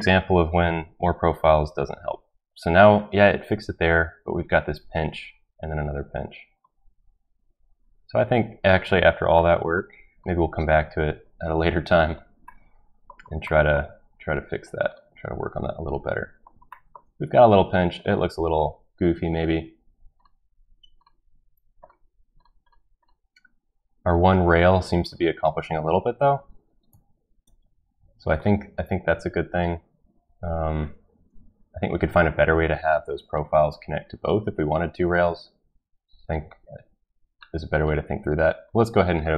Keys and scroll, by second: 26.9 ctrl+z.